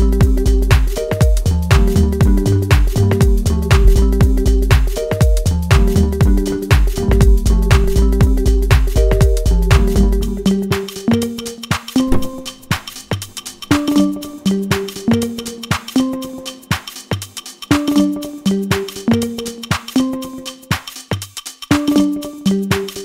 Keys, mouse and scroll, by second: 5.4-5.8 scroll down 1, 7.9-9.5 middle drag, 9.5 click, 11.5 scroll down 1, 11.9-14.6 middle drag, 14.6-15.2 scroll up 2, 15.2 shift+middle click, 16.4-16.9 scroll up 1, 16.9-23.0 middle drag.